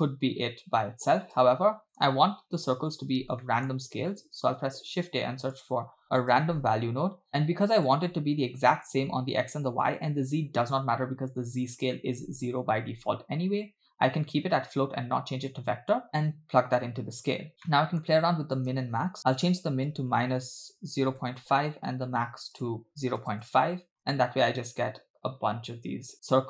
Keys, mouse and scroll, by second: 1.5 space, 3.5 middle click, 3.9-4.4 scroll up 2, 4.7 shift+a, 9.9 click, 13.1-15.9 scroll up 2, 16.0-16.8 drag, 17.6 space, 17.7 middle click, 18.2-18.7 scroll up 3, 19.2-21.6 drag, 22.6 click, 24.0 space.